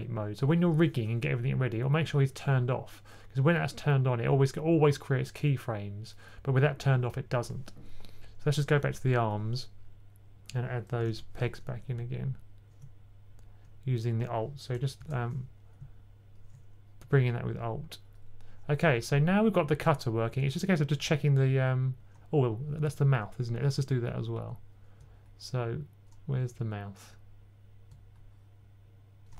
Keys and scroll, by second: 10.9 super+p, 14.9 super+p.